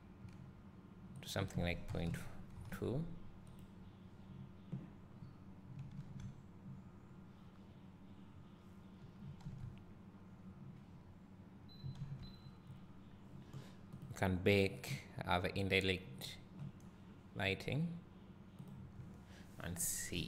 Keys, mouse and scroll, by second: 4.3 click, 5.2 middle click, 5.2 scroll up 1, 6.3 ctrl+s, 7.3 scroll down 1, 11.6-12.2 scroll up 1, 12.7 scroll down 1.